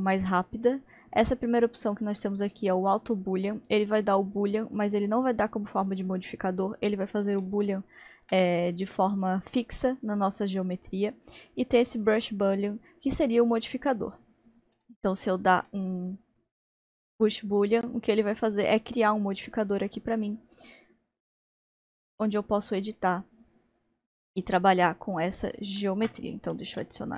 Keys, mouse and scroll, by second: 6.8-7.7 scroll down 1, 7.7-19.0 shift+middle drag, 24.9-26.8 shift+middle drag, 26.8 shift+a.